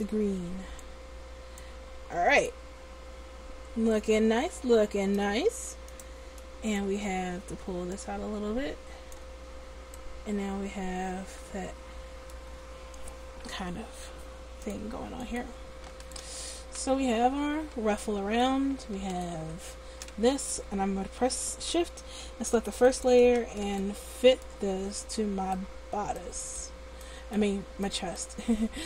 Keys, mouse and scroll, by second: 1.0 click, 6.1-9.3 middle drag, 8.1 click, 8.1 right click, 9.3-10.3 drag, 15.5 click, 16.4 right click, 22.9-25.8 drag.